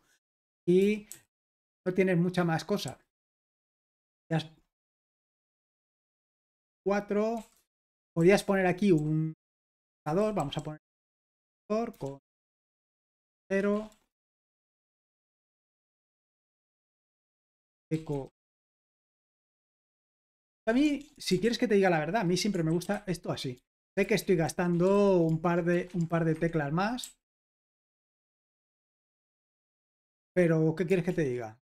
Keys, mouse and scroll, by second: 0.0-1.1 typing, 3.2-5.2 typing, 6.4-9.0 typing, 10.0 Escape, 10.2-10.6 typing, 11.9-15.8 typing, 17.4-21.4 typing, 22.7-28.5 typing, 28.7 super+h, 29.1 ctrl+p, 30.3 Return, 31.1 super+l.